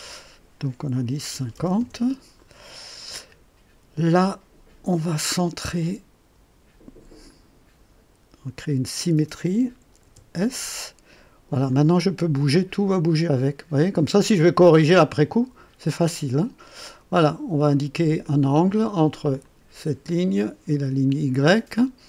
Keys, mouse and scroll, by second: 1.3 KP_5, 1.5 KP_0, 1.7 Return, 5.7 click, 7.2 click, 8.8 click, 10.0 s, 11.7-18.4 drag, 19.4 click, 20.7 click.